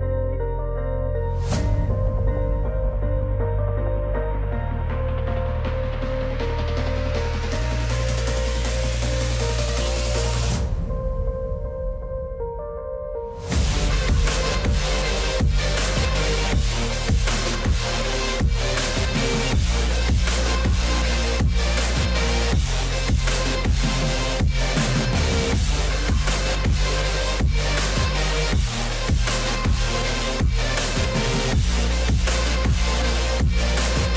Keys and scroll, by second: 3.0 alt+w, 4.3 F4, 20.6 alt+w.